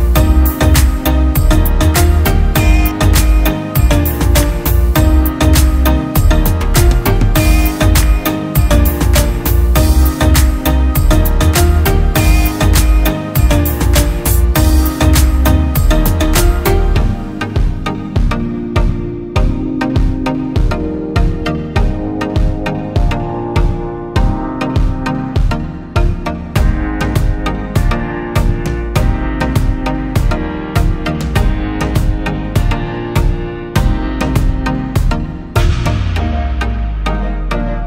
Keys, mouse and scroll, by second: 1.2 Return, 1.6 Down, 1.8 Down, 3.6 Up, 4.0 Up, 4.4 Down, 4.6 Down, 7.1 double click, 26.4-28.1 typing, 32.8 typing.